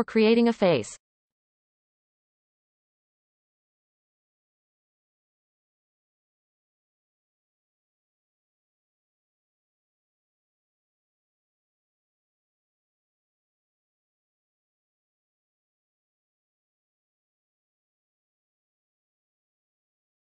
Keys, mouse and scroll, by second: 0.5-1.8 shift+middle drag, 1.8-2.8 scroll up 2, 2.8 shift+click, 3.2-3.9 scroll down 4, 3.9 shift+middle click, 4.3-5.0 scroll up 6, 5.0 shift+middle click, 5.4-5.9 scroll up 3, 6.5 scroll up 2, 7.3 shift+click, 7.7-8.8 scroll down 11, 8.8-9.9 shift+middle drag, 9.9-10.6 scroll up 4, 11.0 scroll up 1, 11.0 shift+click, 11.3 shift+click, 11.7 scroll down 1, 12.2-12.9 scroll down 3, 12.9 shift+middle click, 13.4-13.9 scroll up 4, 13.9 shift+middle click, 14.2-15.5 scroll up 3, 15.5 shift+click, 17.0-18.7 scroll down 12, 18.7-20.2 shift+middle drag.